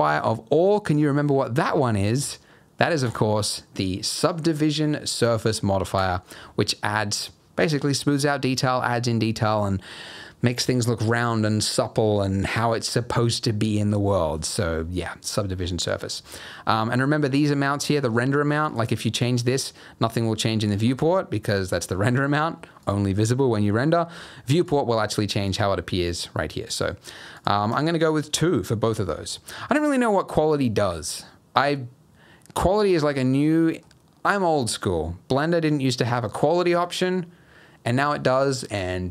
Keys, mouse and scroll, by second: 3.0 click, 14.5-15.5 scroll up 2, 15.5-16.1 scroll down 6, 16.2 shift+middle click, 17.6-18.6 scroll down 2, 18.6 click, 18.6 scroll down 1, 18.8 click, 19.2 click, 22.8 click, 24.4 click, 24.6 click, 25.4 click, 27.3 click, 27.7 click, 33.4 middle click, 35.0-36.4 scroll down 1.